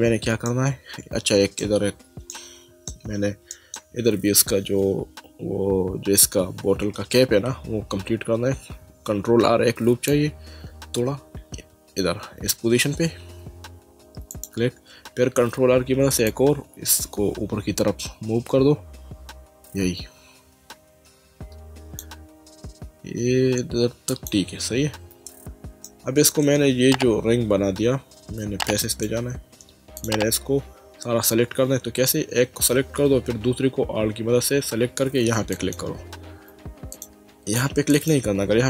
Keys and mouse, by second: 0.5 middle click, 2.3 shift+middle click, 3.5 middle click, 9.5 ctrl+r, 10.1 click, 14.3 click, 15.8 ctrl+r, 16.3 click, 24.1 click, 25.8 shift+middle click, 28.9 click, 30.0 click, 35.5 alt+click, 36.9 click, 37.9 alt+click.